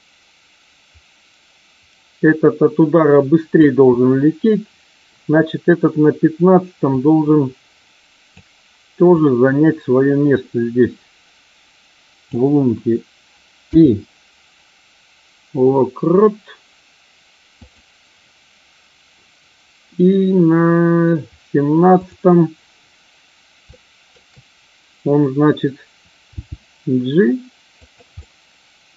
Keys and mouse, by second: 6.9-8.4 drag, 9.0-12.2 drag, 21.9 click, 23.6-24.0 shift+middle drag, 26.2 g, 27.7 drag, 28.1-28.9 middle drag.